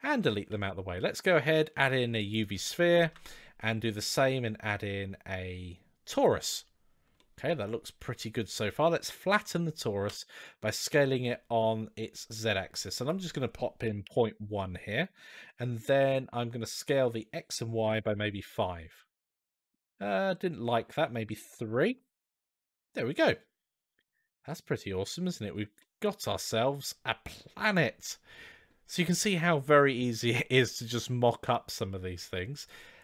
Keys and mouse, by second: 0.0-0.3 typing, 2.8 shift+a, 7.0-8.6 middle drag, 12.8-14.7 drag, 16.0-18.7 drag, 19.1-19.5 middle drag, 20.1-22.3 drag, 22.7-23.1 middle drag, 24.9-25.4 shift+middle drag, 25.6-28.7 middle drag, 32.5-33.0 drag.